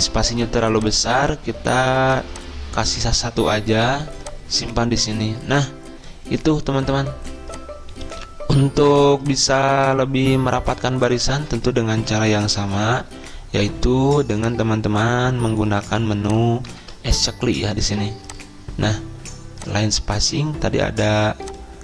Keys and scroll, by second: 0.3 ctrl+a, 11.9 ctrl+a, 12.5 ctrl+[, 12.7 ctrl+[, 13.2 ctrl+[, 17.4 ctrl+a.